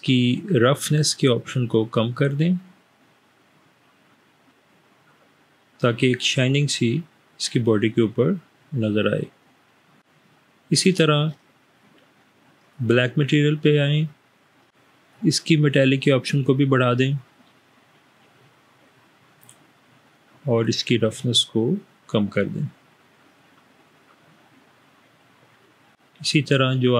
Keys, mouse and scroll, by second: 1.5-9.9 drag, 15.3-19.4 drag, 21.6-25.9 drag.